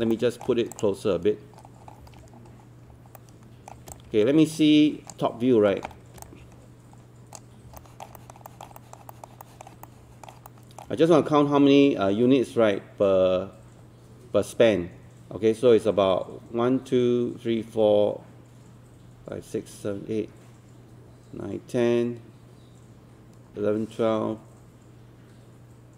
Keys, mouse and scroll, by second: 0.1 alt+middle click, 0.7 click, 1.6 scroll down 1, 2.2 scroll up 1, 3.2 alt+middle click, 4.0-5.4 drag, 5.7 scroll up 1, 6.3-7.4 drag, 7.8 alt+middle click, 8.5 alt+middle click, 8.8 alt+middle click, 9.1 alt+middle click, 9.4 alt+middle click, 10.5 alt+middle click.